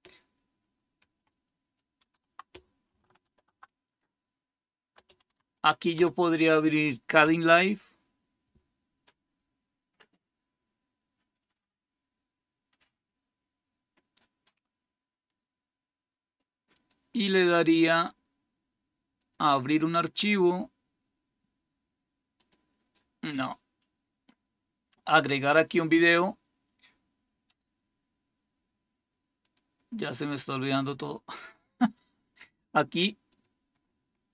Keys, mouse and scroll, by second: 1.9 super+3, 3.1 alt+super+d, 4.7-5.8 typing, 16.6 click, 19.1 click, 22.3 click, 25.2 click, 29.3 click, 29.7 click, 30.5 click, 33.2 click.